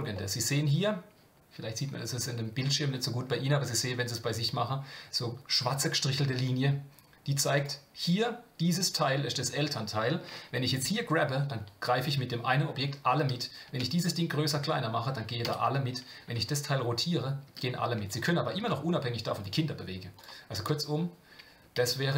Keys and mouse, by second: 0.1-0.8 middle drag, 7.5 click, 9.7-10.2 middle drag, 13.7 s, 16.3 r, 18.2 click, 18.5 g, 20.1 click, 20.5 g.